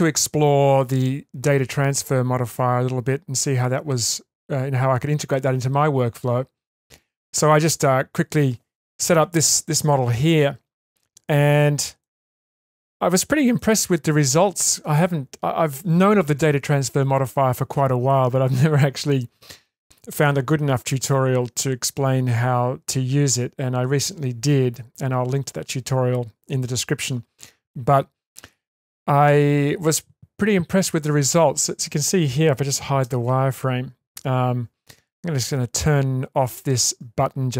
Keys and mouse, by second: 11.0 middle click, 12.0 middle click, 13.6-14.4 shift+middle drag, 33.0 shift+space.